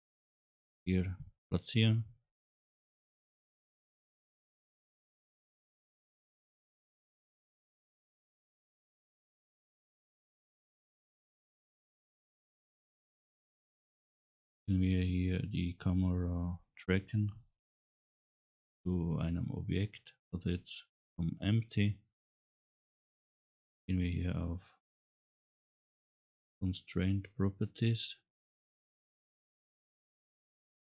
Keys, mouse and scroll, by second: 5.6 scroll up 1, 7.5 click, 12.4 click, 13.4 click, 14.6 scroll down 1, 16.0 scroll up 1, 28.3 click, 29.6-30.7 drag.